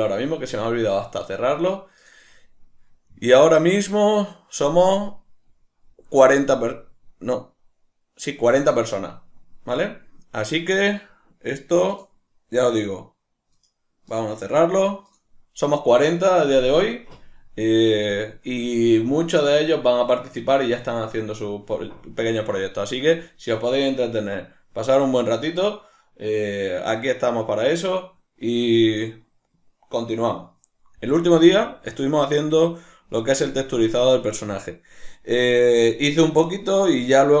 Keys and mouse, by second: 18.1 middle click, 23.0 middle click, 31.5 middle click.